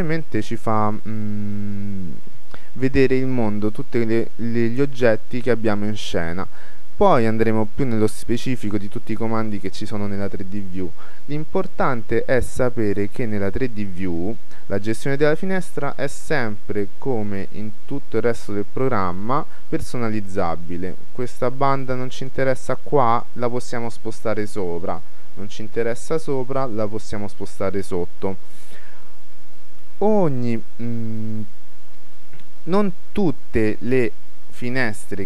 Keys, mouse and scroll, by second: 3.7-4.6 scroll down 1, 4.6-6.4 middle drag, 7.0-8.8 scroll up 1, 13.1-14.8 drag, 22.3-24.1 right drag, 26.0-27.7 right drag.